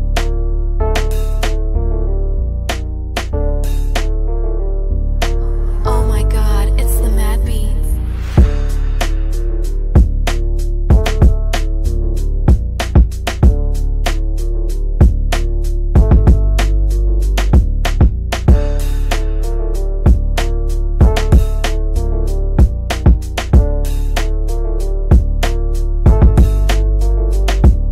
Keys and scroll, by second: 2.4 g.